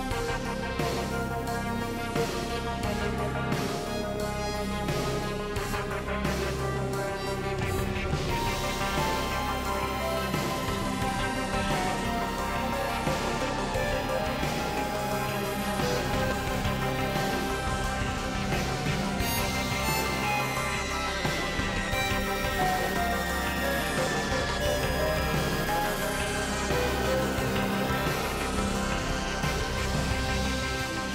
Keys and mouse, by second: 2.9 click, 3.6 g, 5.5 g, 6.9-8.4 drag, 7.2 z, 10.5 alt+z, 10.7 middle click, 11.3 Tab, 11.7 middle click, 12.3 Tab, 14.3 2, 14.7 alt+z, 15.7 click, 17.2 alt+z, 18.0 g, 20.0 alt+z, 20.4 click, 22.2 Tab, 22.3 KP_3, 22.5 KP_Decimal, 22.7 alt+z, 23.8-25.3 drag, 26.0 KP_3, 26.2 Tab, 26.6 alt+z, 28.0 shift+middle click, 30.4 ctrl+r.